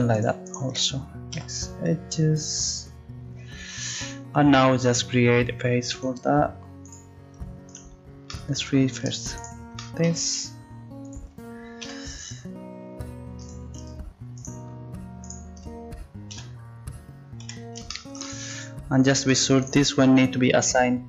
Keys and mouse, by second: 1.4 x, 5.9-17.4 right drag, 11.8 f, 16.3 f, 17.4 a, 19.2-21.0 drag.